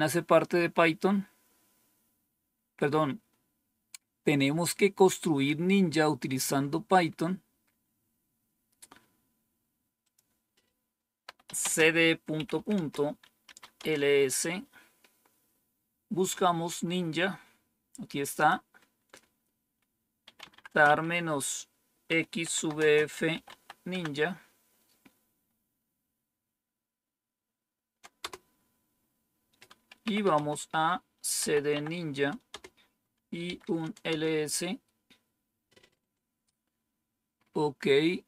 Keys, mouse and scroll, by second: 9.9 click, 10.9-14.0 typing, 16.6 scroll up 1, 18.2 click, 19.9-23.8 typing, 28.1 Return, 29.7-31.8 typing, 32.4 Return, 33.1-33.8 typing, 34.0 Return.